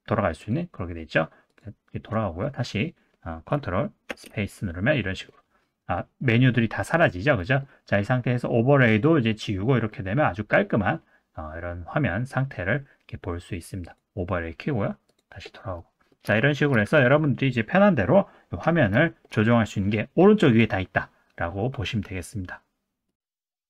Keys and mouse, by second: 1.5 click, 2.4 click, 4.1 ctrl+space, 5.4-6.0 middle drag, 7.4 middle click, 8.9 click, 9.9-12.3 middle drag, 13.8 click, 15.2 click, 15.8 middle click, 16.4 shift+middle click, 16.9 middle click, 19.0 shift+middle click, 23.5 middle click.